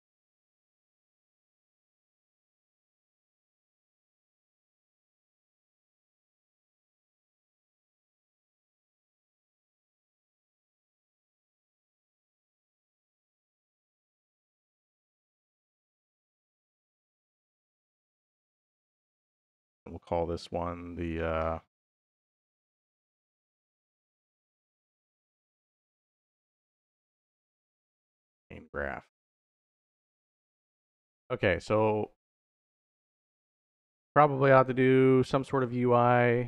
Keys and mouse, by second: 1.3 BackSpace, 4.6-6.4 drag, 7.5-16.0 drag, 10.9 s, 13.9 BackSpace, 14.4 BackSpace, 14.5 BackSpace, 15.1 BackSpace, 16.9 click, 18.8 click, 18.9-29.0 drag, 29.4 click.